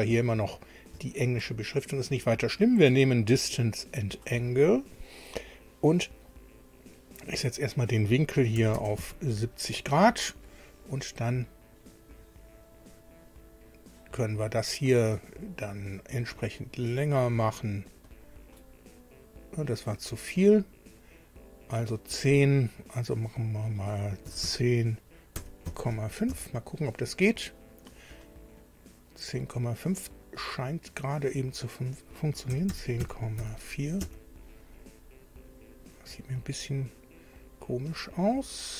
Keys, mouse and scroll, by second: 2.1 click, 3.8 click, 7.2 click, 8.6 KP_7, 8.7 KP_0, 9.0 KP_Enter, 12.7 click, 15.2 click, 15.7 click, 18.1 click, 20.5 click, 23.3 click, 24.2 KP_1, 24.4 KP_0, 25.4 ,, 25.7 KP_5, 26.3 Tab, 31.6 click, 32.5 KP_1, 32.7 KP_0, 33.0 KP_Decimal, 33.4 KP_4, 34.6 Tab.